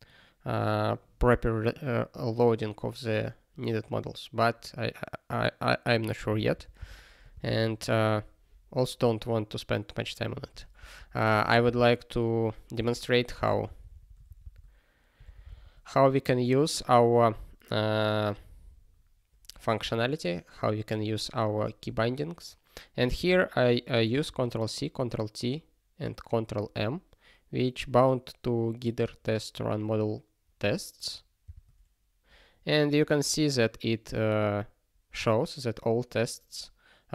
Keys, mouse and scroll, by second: 7.5 ctrl+s, 11.6 super+b.